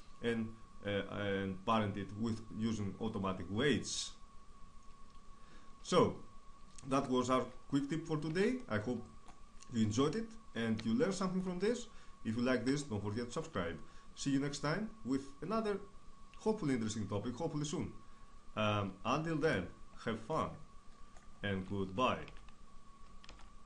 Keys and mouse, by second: 4.6 click, 5.3 middle click, 6.2 h, 7.1-12.3 middle drag.